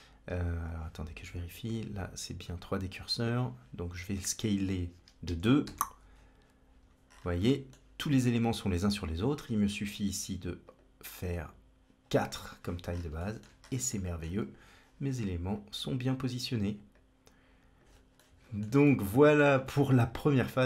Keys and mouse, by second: 1.7-2.8 drag, 3.8 s, 5.9 Tab, 7.4 middle click, 10.6 click, 11.2 click, 13.1 shift+middle click, 13.8 middle click, 15.5 click, 16.8 click, 18.2-18.5 shift+middle drag, 18.9 middle click, 20.4-20.6 drag.